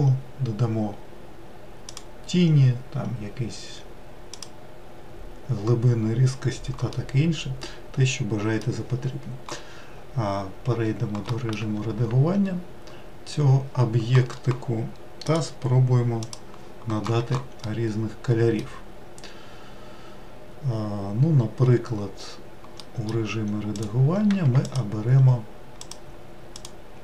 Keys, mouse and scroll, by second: 5.6-6.3 scroll down 2, 6.8-11.3 middle drag, 11.3 Tab, 12.3-13.3 scroll down 1, 17.3-22.8 middle drag, 22.8 Tab, 23.5 click, 25.6 shift+click.